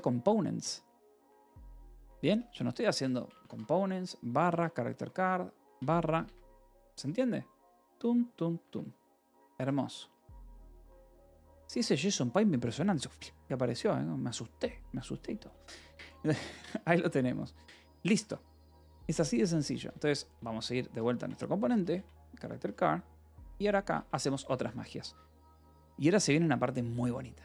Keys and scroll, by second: 0.0-0.2 typing, 0.6 Escape, 2.0-4.8 typing, 4.4 Return, 5.6 Return, 6.1 Escape, 7.5 u, 8.5 Escape, 9.0-13.4 typing, 16.0 k, 16.9 k, 17.2 j, 18.8 ctrl+s, 19.0 shift+;, 19.6 k, 21.0 Return, 21.2-22.4 typing, 23.8 Return, 25.0 alt+Tab, 25.4 space.